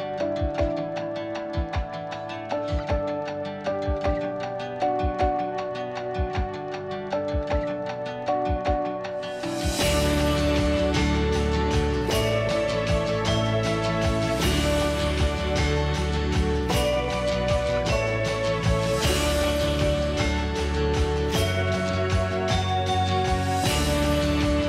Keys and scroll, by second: 0.3 p, 2.3 ▯, 3.3 Delete, 4.0 p, 5.6 e, 8.5 p, 9.1 Escape, 13.8 r, 18.3 p, 18.9 ctrl+g, 21.4 Escape.